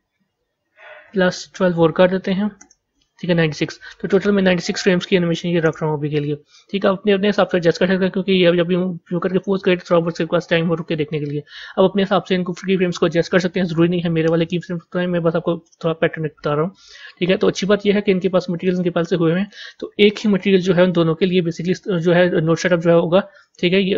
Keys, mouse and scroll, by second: 4.0-7.1 drag, 8.2-11.3 drag, 17.3 click, 18.1-21.1 middle drag, 23.7 z.